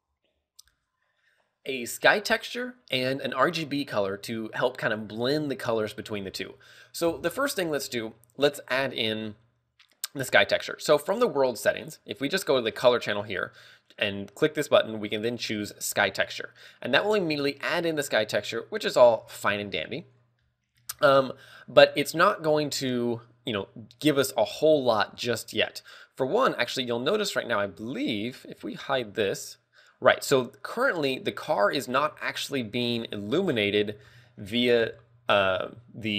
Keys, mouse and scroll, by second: 18.4 scroll down 2, 20.4 scroll down 5, 20.7 middle click, 21.2-21.8 scroll up 4, 22.5 middle click, 23.1 scroll up 2, 28.1 right click, 28.8 h.